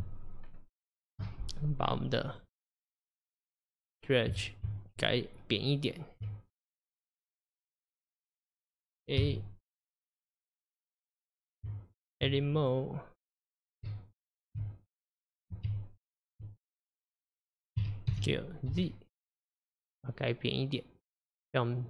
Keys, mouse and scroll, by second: 2.3 click, 4.7 Tab, 9.2 a, 10.4 click, 10.7 click, 11.7 Tab, 12.6 click, 13.9 Tab, 15.7-16.4 1, 16.6 click, 17.8 a, 18.1 s.